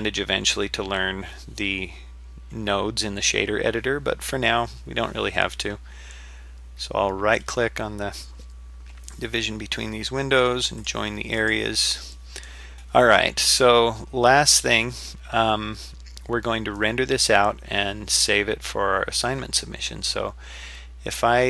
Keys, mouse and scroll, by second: 7.4 right click, 10.9 click.